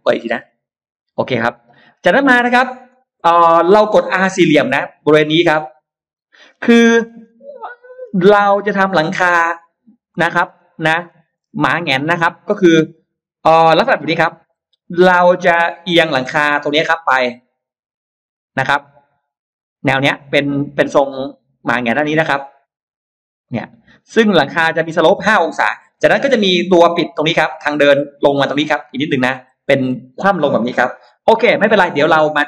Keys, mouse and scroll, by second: 0.3 click, 1.2 click, 2.0 middle click, 2.5 scroll down 1, 2.9-4.6 scroll up 8, 6.0 click, 6.3-7.4 scroll down 6, 7.6-8.8 scroll up 6, 9.7 click, 10.0-10.6 scroll down 2, 10.8 middle click, 11.3-11.7 scroll up 2, 11.5 space, 11.7 middle click, 14.1 shift+x, 15.2-16.8 drag, 17.3 click, 18.2 click, 20.2-22.2 drag, 22.6-23.8 drag, 24.4 click, 26.0-28.6 shift+drag.